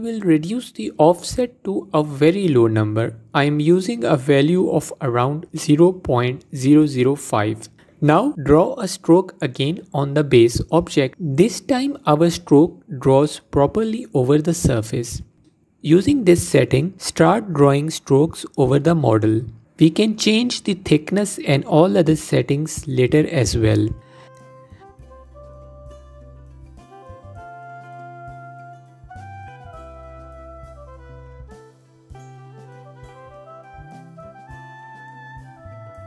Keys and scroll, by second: 14.1 ctrl+z, 15.9 f.